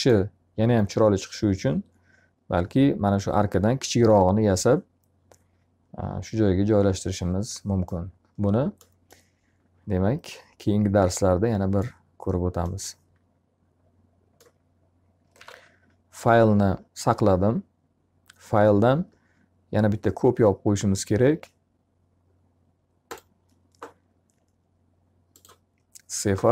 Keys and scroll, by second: 14.9 ctrl+s.